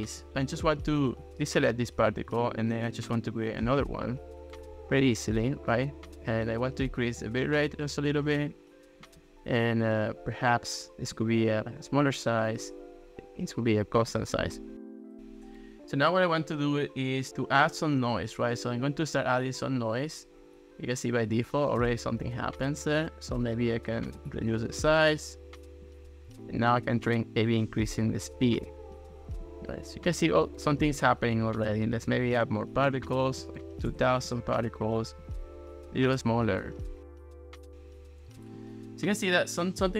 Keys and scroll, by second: 13.2 super+z, 32.6-33.6 typing, 33.9 Return.